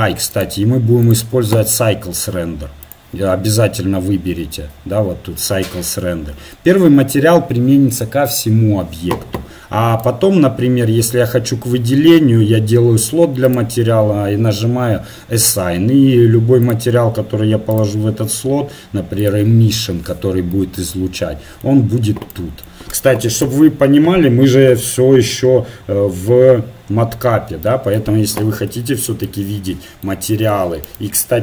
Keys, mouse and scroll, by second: 3.0-6.3 drag, 10.1-11.7 drag, 13.5-15.4 drag, 16.7-19.5 drag, 23.4 n, 27.1-29.0 drag, 28.8 Tab, 30.9-31.4 right drag.